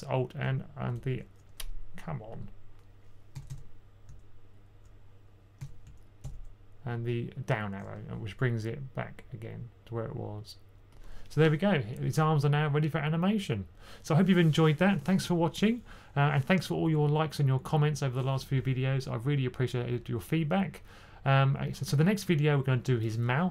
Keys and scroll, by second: 0.4 alt+Down, 0.8 alt+Down, 3.2 b, 3.4 b, 5.5-6.1 typing, 6.1 alt+Down.